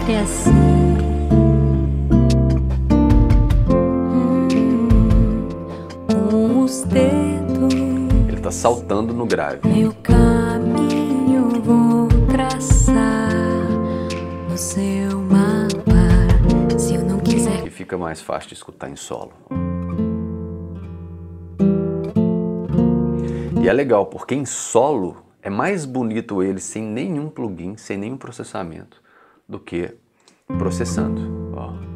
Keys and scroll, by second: 17.2 space, 19.2 space, 23.2 space, 30.2 space.